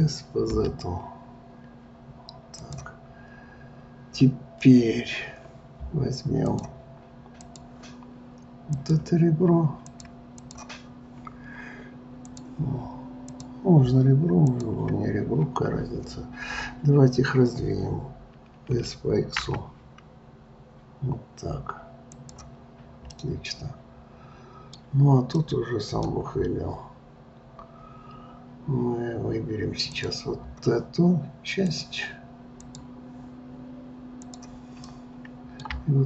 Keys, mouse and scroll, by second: 3.2-6.5 scroll, 6.5-8.9 drag, 9.9 click, 10.4 click, 12.3 click, 13.3 click, 14.5 shift+click, 18.7 s, 23.1-28.4 middle drag, 29.9 click, 31.7 click, 32.5 click, 34.2 click, 34.8-36.0 middle drag.